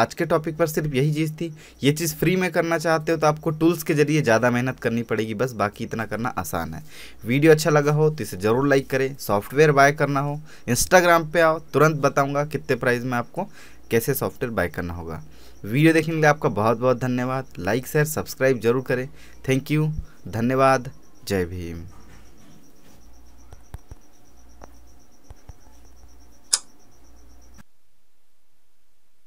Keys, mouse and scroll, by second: 10.8 w.